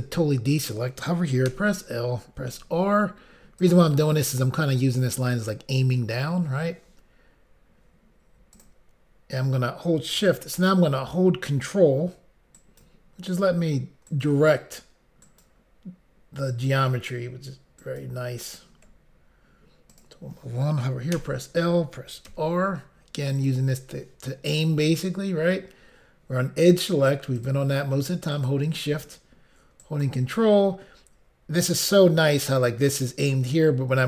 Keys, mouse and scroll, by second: 2.5 l, 2.5 r, 3.6 click, 8.5 click, 11.6 shift+click, 12.6 ctrl+right click, 14.1 ctrl+right click, 14.2 ctrl+right click, 15.2 ctrl+right click, 15.4 ctrl+right click, 16.5 ctrl+right click, 16.7 ctrl+right click, 17.8 ctrl+right click, 19.9 click, 20.0 click, 21.1 i, 21.4 l, 22.3 r, 23.4 click, 27.4 click, 28.3 shift+click, 29.8 ctrl+right click.